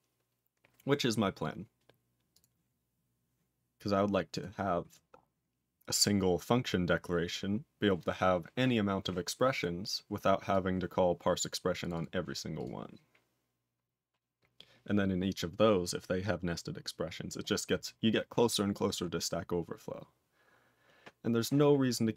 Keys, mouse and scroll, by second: 2.3 click, 4.3 click, 6.7 scroll up 2, 8.8-9.7 scroll up 4, 9.7-10.5 scroll down 9, 10.5 click, 11.3 click, 11.7 click, 11.9 double click, 12.6 click, 17.5-19.0 scroll up 6, 19.0 scroll down 10, 19.7-20.5 scroll down 1, 20.5-21.5 scroll down 4.